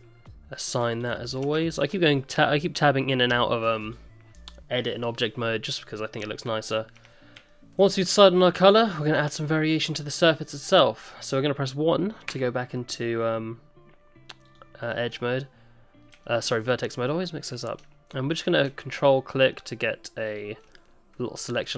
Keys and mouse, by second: 0.9 click, 1.3 middle click, 1.5 Tab, 3.8 click, 7.2 Tab, 7.5 shift+middle click, 7.9 middle click, 10.0 click, 10.3 middle click, 12.3 1, 14.4 click, 14.9 middle click, 16.2 shift+click, 17.1 middle click, 19.1 ctrl+click, 20.7-21.7 middle drag.